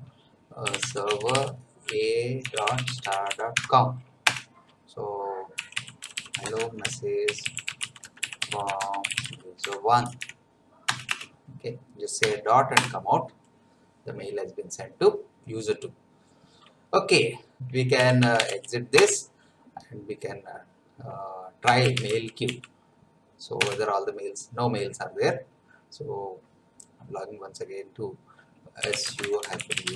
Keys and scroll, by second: 0.4-4.1 typing, 4.3 Return, 5.3-10.6 typing, 10.9 Return, 12.8 Return, 17.7-18.9 typing, 18.9 Return, 21.4-22.9 typing, 23.6 Return, 28.5-29.9 typing.